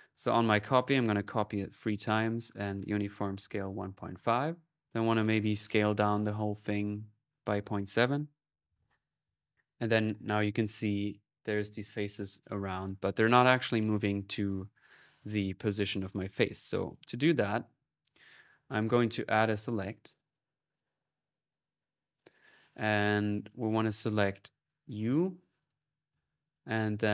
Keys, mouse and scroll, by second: 0.9-4.1 drag, 4.6 click, 5.7-6.5 typing, 6.0-9.2 alt+drag, 7.4 alt+n, 14.1 click, 16.1-19.8 drag, 19.0-19.7 typing, 20.1 click, 20.8 middle click, 21.6 click, 23.5 click, 24.4 click, 25.4 right click, 25.7-26.6 typing, 26.7-27.1 drag.